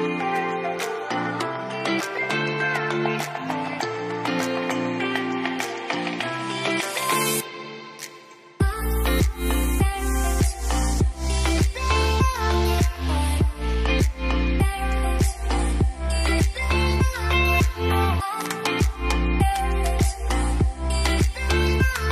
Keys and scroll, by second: 9.9 ctrl+a, 10.4 alt+g, 12.3-13.6 typing, 20.4-21.7 typing.